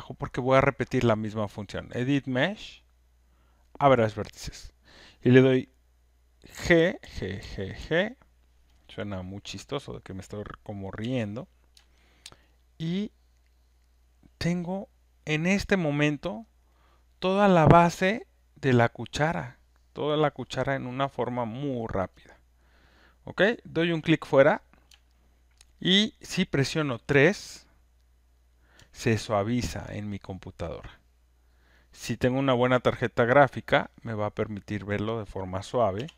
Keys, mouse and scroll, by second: 1.8 click, 3.9 click, 6.5 g, 7.0 g, 7.4 g, 7.7 g, 11.0 g, 12.3 alt+right click, 15.4 alt+click, 16.3 alt+middle click, 16.7 alt+right click, 17.7 alt+click, 20.8 alt+click, 21.2 alt+right click, 21.5 alt+middle click, 22.2 click, 23.5 click, 24.2 alt+scroll, 25.8 alt+right click, 26.2 alt+middle click, 35.0 alt+click, 35.9 1.